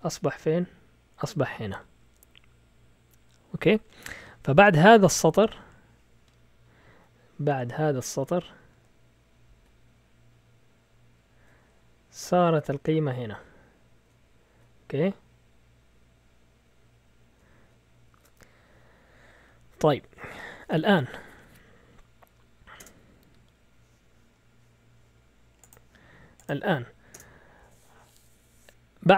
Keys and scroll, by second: 18.0 shift+super+z, 22.7 Return, 27.1 Return.